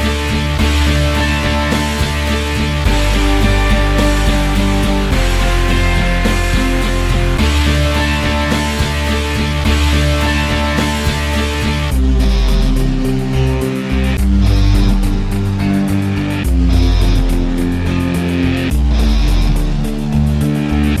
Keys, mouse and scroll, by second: 1.4 scroll down 5, 1.6 alt+click, 1.9-2.5 scroll up 3, 2.2 click, 2.3 middle click, 2.5 f, 2.7 middle click, 2.8 click, 3.3 middle click, 3.4 click, 3.9 middle click, 4.0 scroll up 4, 4.2-8.5 drag, 8.5-9.4 scroll down 10, 8.7 Tab, 9.0 alt+click, 9.4 middle click, 9.5 z, 9.7 alt+click, 10.1 z, 10.2 alt+click, 10.8 middle click, 11.1 alt+h, 11.2 click, 11.4 scroll up 4, 11.7 alt+click, 12.2-12.5 scroll down 1, 12.5 click, 14.6 middle click, 14.8 scroll down 3, 14.9 alt+middle click, 15.0-15.9 alt+drag, 15.9 alt+middle drag, 16.0 scroll down 1, 16.1 alt+drag, 16.3 middle click, 16.7 z, 16.9 alt+click, 17.0 scroll down 1, 17.1 alt+click, 17.8 middle click, 18.1 click, 18.3 c, 18.4-21.0 drag.